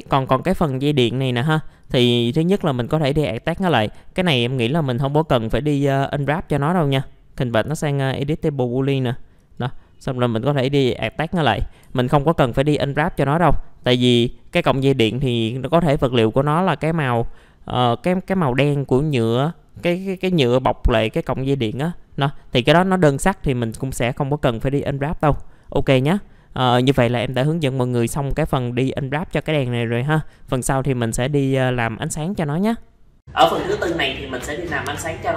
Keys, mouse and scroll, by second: 0.4 F4, 1.2-4.7 drag, 6.3 right click, 8.9 click, 9.4 right click, 10.3 click, 11.4 right click, 11.8 F4, 12.1-12.4 scroll down 1, 12.7 middle click, 13.4-13.8 scroll up 1, 13.8 click, 14.7 middle click, 15.3-15.6 scroll down 1, 16.1 alt+middle click, 17.6-18.9 scroll up 1, 19.1 alt+middle click, 21.1 scroll up 1, 22.4 middle click, 22.6-24.0 scroll down 1, 24.9 alt+middle click, 25.6-27.7 drag, 27.7 scroll up 1, 28.1 alt+middle click, 29.1 middle click, 29.5 alt+middle click.